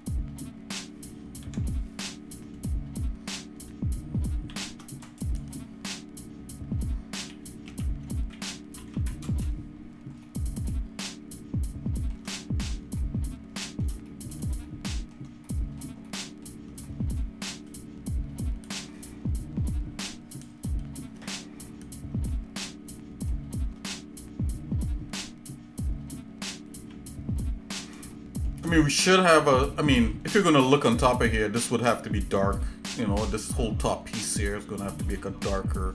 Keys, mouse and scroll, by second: 4.6 shift+d, 7.2 r, 10.2 shift+middle click, 11.0-12.1 shift+middle drag, 12.4 middle click, 13.0 shift+middle click, 14.1 middle click, 14.6 shift+middle click, 15.5 middle click, 16.1 shift+middle click, 16.9 middle click, 22.3-23.3 shift+middle drag, 26.8 shift+s, 28.1 shift+middle click, 29.7 shift+middle click, 30.9 scroll up 1, 31.6 scroll up 1.